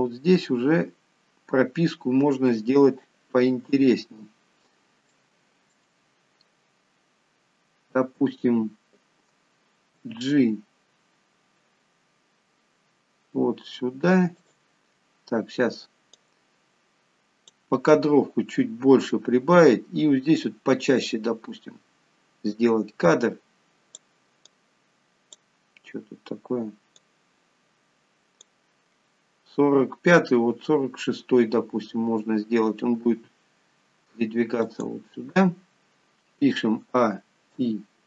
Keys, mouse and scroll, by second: 0.9-2.8 scroll down 3, 2.9 shift+middle click, 4.3-5.2 scroll up 6, 5.2-5.6 scroll up 3, 5.5 shift+middle click, 10.3 g, 16.6 click, 18.2-19.6 scroll up 22, 20.8 click, 24.9 click, 26.0-27.4 scroll down 10, 27.4 click, 33.4 g, 37.2-37.8 a, 37.9 i.